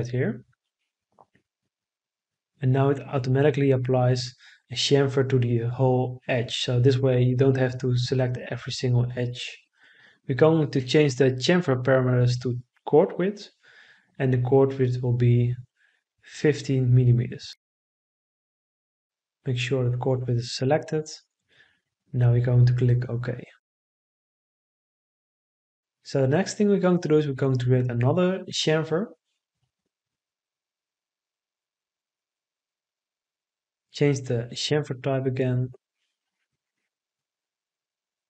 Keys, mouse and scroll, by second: 14.0 1, 14.6 5, 15.3 Return.